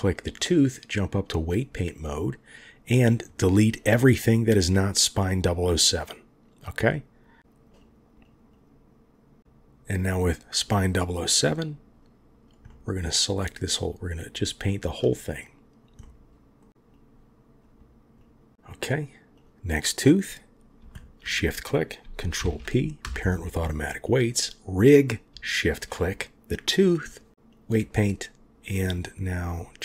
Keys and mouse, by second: 0.7-1.5 drag, 5.8-7.5 drag, 7.6 click, 7.7 click, 7.9 click, 8.0 click, 8.2 click, 8.4 click, 9.4 click, 9.4 right click, 11.3-12.4 drag, 12.6 middle click, 13.4 click, 15.3 click, 15.9 middle click, 16.8 click, 18.2 click, 18.5 middle click, 22.3 ctrl+p, 23.9 click, 27.3 click.